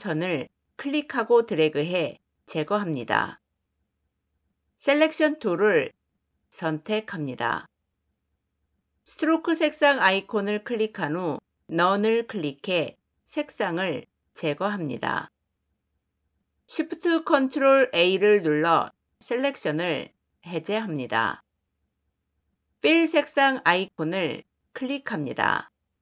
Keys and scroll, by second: 4.9 v, 11.6 /, 16.5 ctrl+shift+a.